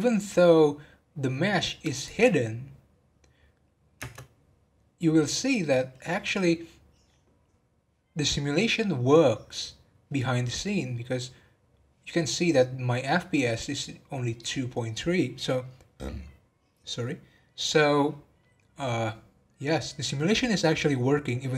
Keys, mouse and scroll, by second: 0.3 scroll up 1, 1.3-1.9 scroll up 2, 1.9 click, 4.0 space.